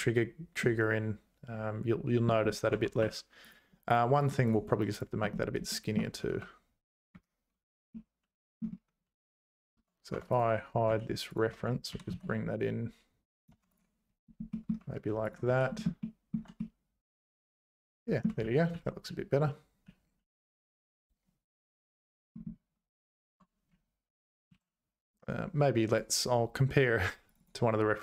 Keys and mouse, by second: 0.6-2.3 middle drag, 2.7 Tab, 3.0 3, 6.3 `, 7.9 middle click, 10.1 Tab, 10.3 click, 10.9 h, 11.3 click, 11.5 Tab, 11.9 g, 13.6 Tab, 13.7 click, 14.5 middle click, 15.3 click, 15.5 h, 15.8 shift+middle click, 16.6-18.2 middle drag, 18.4 ctrl+z, 18.7 ctrl+z, 19.1 ctrl+z, 19.4 ctrl+z, 19.9 ctrl+z, 21.6 ctrl+z, 23.3 Tab.